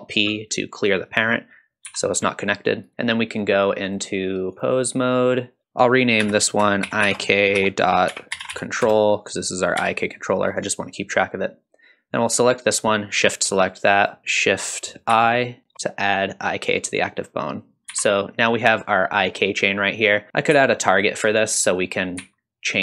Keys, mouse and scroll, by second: 1.9 g, 3.9-4.6 drag, 6.2 F2, 9.8 g, 12.3 click, 14.0 shift+click, 15.1 shift+i, 17.5 click, 17.9 g, 20.5 g, 22.2 g.